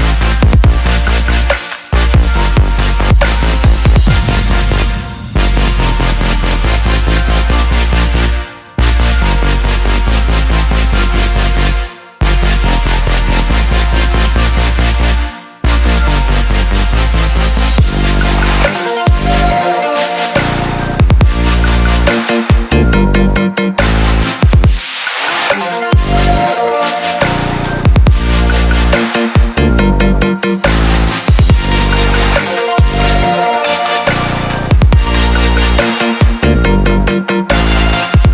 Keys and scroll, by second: 2.6-3.4 typing, 4.1 Return, 14.4 ctrl+z, 28.2 ctrl+z, 29.5 ctrl+d, 37.3 ctrl+t.